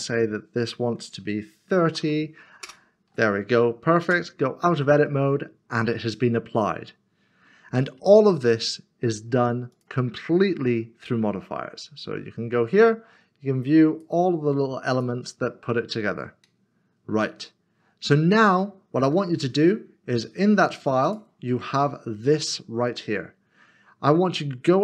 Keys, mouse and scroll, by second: 1.9 typing, 2.6 Return, 4.0 Tab, 5.0 Tab, 5.2 middle click, 9.7 middle click, 10.5 scroll down 1, 16.1 scroll up 1, 16.4 middle click, 19.3 scroll down 1, 21.0 click, 22.9 double click.